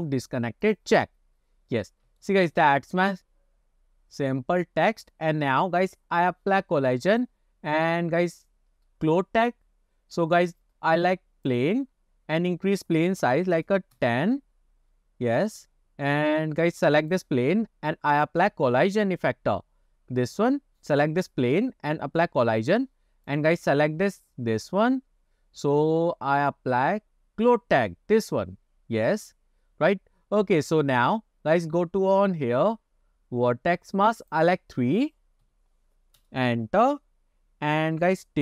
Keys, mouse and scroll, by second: 0.8 click, 1.3-1.7 scroll down 2, 1.7 scroll up 2, 2.3-2.6 shift+middle drag, 2.7-5.7 middle drag, 7.2-12.1 drag, 12.1 scroll down 1, 13.2 s, 15.4 scroll down 2, 15.8 scroll up 2, 16.5 scroll up 2, 17.1 click, 18.2 click, 21.0 click, 22.6 click, 23.3 click, 28.3-28.7 drag, 34.3-36.7 drag.